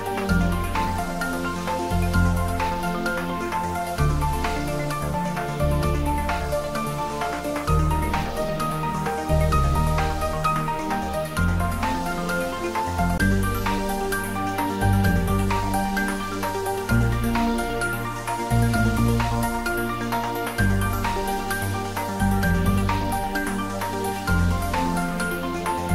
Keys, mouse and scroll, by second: 0.7 Tab, 1.4-2.8 scroll down 1, 5.6-6.0 scroll up 1, 6.0-6.6 middle drag, 8.0-8.9 click, 8.6-12.7 drag, 11.8-13.2 right drag, 13.2 click, 13.7 scroll down 1, 14.7 click, 15.4 Tab, 15.7 click, 17.4 scroll down 1, 17.7-18.3 middle click, 18.4-19.0 scroll up 1, 19.0-19.6 middle click, 19.7-21.3 scroll down 1, 22.8-23.4 scroll down 1, 24.8-25.6 drag.